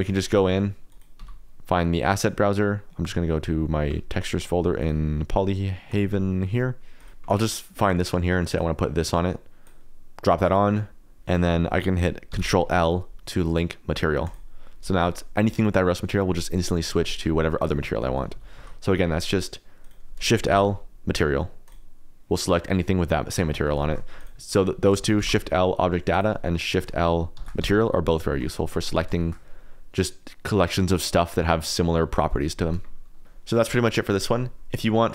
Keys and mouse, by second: 0.0 click, 0.8 click, 2.2-3.2 drag, 3.4 click, 3.9 middle click, 4.3 click, 5.9 click, 7.0 click, 8.5 click, 12.3 ctrl+l, 15.0 click, 17.5 shift+click, 18.4 ctrl+z, 18.5 ctrl+z, 19.3 click, 19.8 click, 20.5 shift+l, 23.8 shift+click, 24.1 click, 25.1 shift+l, 26.7 click, 27.3 shift+l, 33.1 click, 34.1 click.